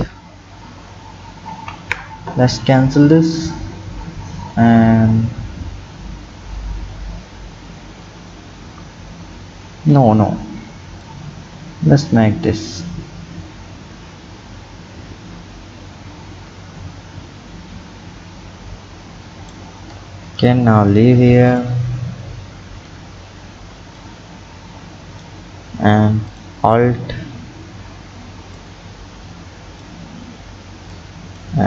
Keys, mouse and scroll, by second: 1.5 ctrl+z, 11.0-14.1 drag, 19.9 Tab, 21.5 click, 22.9 Tab, 24.0-26.4 drag, 28.6 click, 30.1-31.0 scroll down 2, 31.0 click.